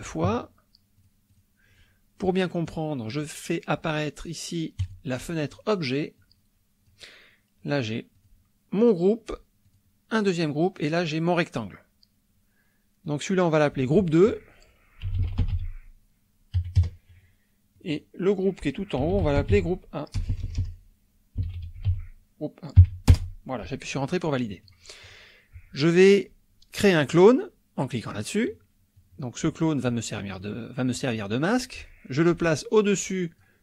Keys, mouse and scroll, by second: 1.0 click, 1.4 click, 2.6 click, 4.8 click, 6.2 click, 8.2 click, 8.8 click, 9.6 click, 10.1 click, 10.8 click, 13.0 click, 13.6 click, 14.8-16.5 typing, 16.7 KP_Enter, 17.8 click, 18.7-22.8 typing, 23.1 Return, 24.7 click, 25.0 click, 28.1 click, 28.9-30.0 drag, 30.4-33.6 drag.